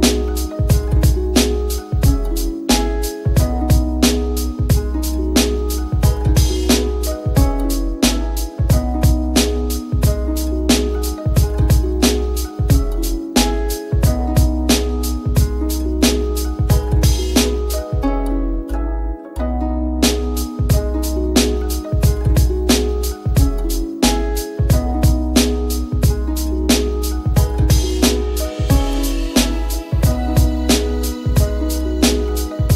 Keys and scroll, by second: 4.1 x, 10.3 [, 11.2 [, 11.9 ].